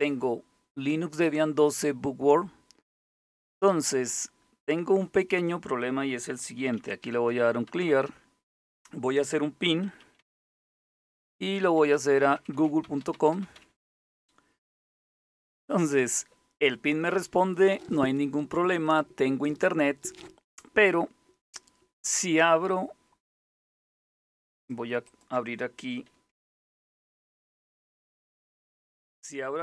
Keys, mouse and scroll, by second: 2.1-2.7 scroll up 2, 2.7-6.2 scroll down 1, 6.0-7.2 typing, 7.3 Return, 9.1-13.7 typing, 23.0 click, 24.2 click, 24.7 click, 26.1 alt+super+d.